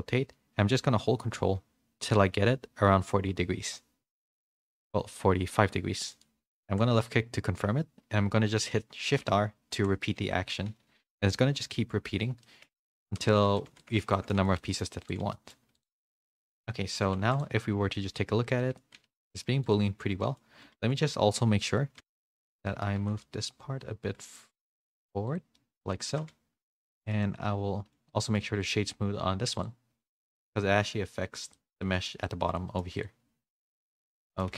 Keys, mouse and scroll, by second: 9.1-14.5 typing, 12.4 middle click, 13.0 Tab, 13.8 middle click, 14.1 shift+middle click, 14.5 middle click, 15.3 middle click, 17.9 middle click, 17.9 h, 18.6 middle click, 19.2 click, 20.2-22.0 middle drag, 22.0 ctrl+z, 22.0 alt+h, 22.1 a, 22.2 a, 22.4 click, 22.6 middle click, 23.0 g, 25.6 middle click, 26.1 g, 27.0 middle click, 27.2 middle click, 30.4 click, 31.5 click, 32.2 middle click, 32.2 h, 33.0-34.2 drag, 34.2 middle click.